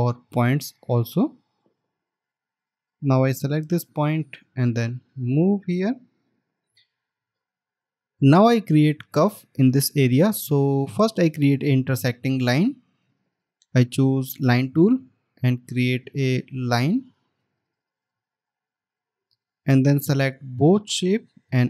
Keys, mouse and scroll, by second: 2.2 alt+scroll up 1, 7.1 alt+scroll down 1.